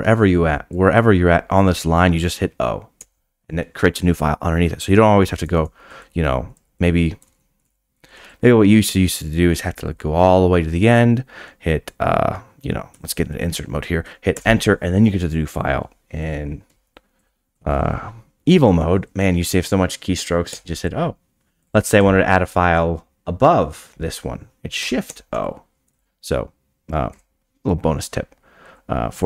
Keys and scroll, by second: 3.0 o, 5.5 shift+a, 7.2 BackSpace, 7.4 BackSpace, 7.9 d, 12.9 i, 13.3 Right, 14.3 Return, 16.6 d, 20.5 o, 25.0 shift+o, 26.2 d.